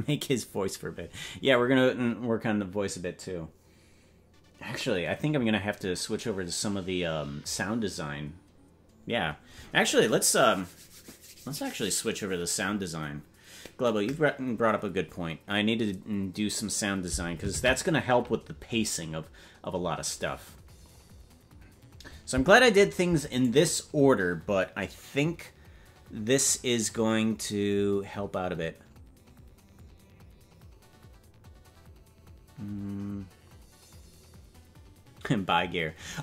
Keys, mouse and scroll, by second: 19.9 ctrl+s, 23.4 right click.